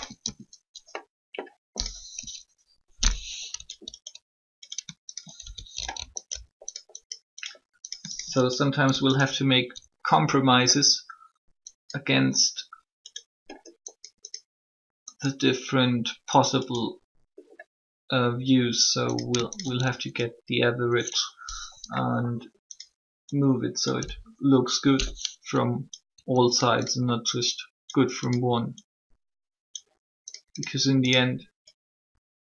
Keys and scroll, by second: 2.1 3, 23.8 1.